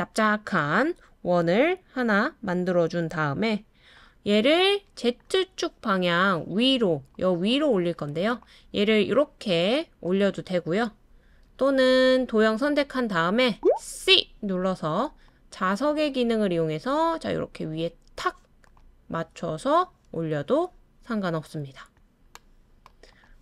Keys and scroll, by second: 11.5 typing, 14.0 typing.